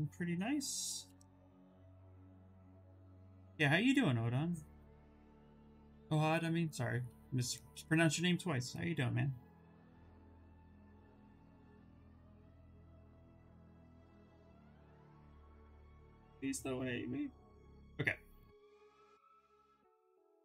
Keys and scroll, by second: 10.1 ctrl+z, 10.2 ctrl+z, 10.7 s.